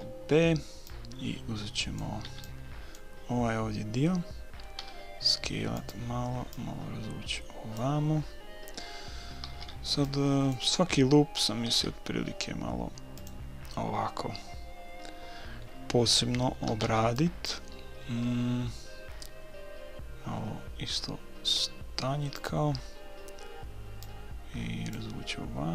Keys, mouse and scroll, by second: 0.0 b, 0.9-2.7 drag, 2.3 b, 4.8 s, 6.6-8.3 drag, 9.4 a, 9.6 b, 11.8 s, 16.7 a, 16.9 b, 19.2 s, 24.0-25.7 drag.